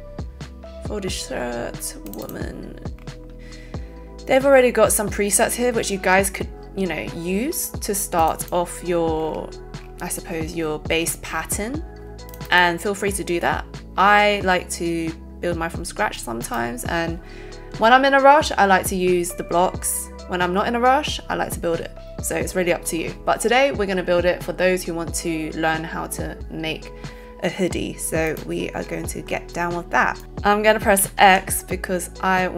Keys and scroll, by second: 31.2 x.